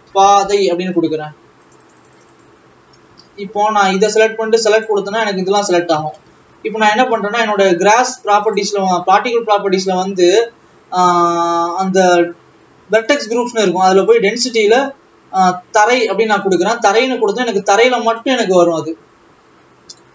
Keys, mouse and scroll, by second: 1.6 a, 2.5 click, 3.2 alt+a, 3.9 click, 5.0 click, 5.7 alt+a, 7.0 Tab, 15.9 click, 16.6 alt+a, 18.8 click.